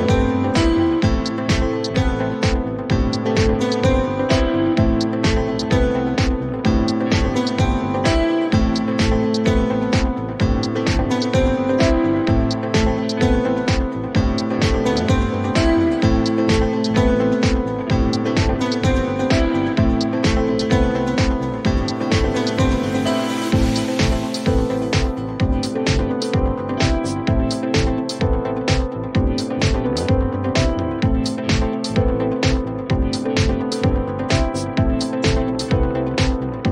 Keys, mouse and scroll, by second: 1.5 click, 2.0-2.4 typing, 4.9 Return, 6.1 click, 6.5-7.3 typing, 9.1 click, 9.4-11.0 typing, 13.3 click, 13.5-14.3 typing, 15.6-16.3 typing, 18.2 click, 21.3 click, 22.9-23.9 typing, 26.9 click, 29.4 click, 32.5 click, 33.4-34.4 typing.